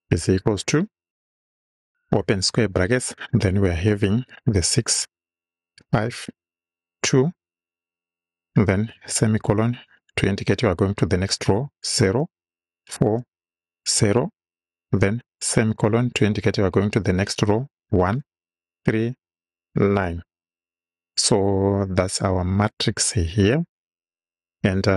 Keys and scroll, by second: 0.2 =, 2.2 [, 4.5 6, 5.0 space, 6.1 5, 6.4 space, 6.8 2, 9.0 ;, 11.6-14.0 typing, 15.5 ;, 17.8-20.0 typing.